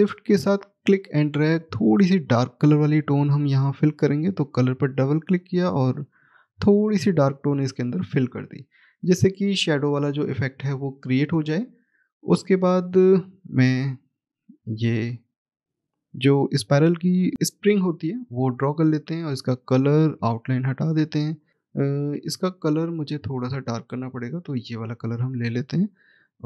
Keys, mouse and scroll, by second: 1.2 shift+right click, 3.1 click, 3.4 double click, 5.1 click, 9.7 scroll down 1, 10.7 middle click, 12.2 click, 12.8-14.8 scroll up 1, 14.8 click, 18.2 click, 20.4 right click, 22.9 click, 25.4-26.2 scroll up 1, 26.2 click.